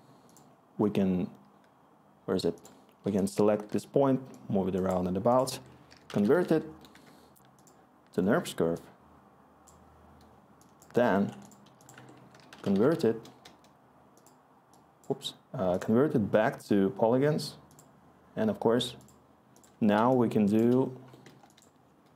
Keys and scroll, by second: 0.7 s, 3.0-3.6 typing, 5.4-7.0 typing, 11.9-13.3 typing.